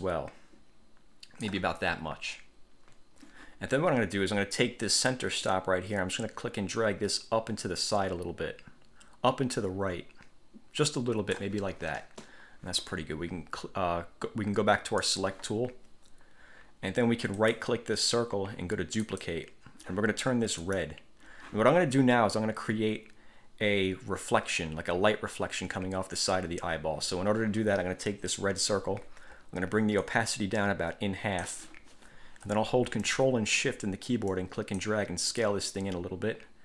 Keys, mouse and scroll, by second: 5.6-11.7 drag, 15.2 click, 17.7 click, 19.2 click, 20.8 click, 30.2-31.8 drag, 34.5 ctrl+shift+click, 35.5-36.6 ctrl+shift+drag.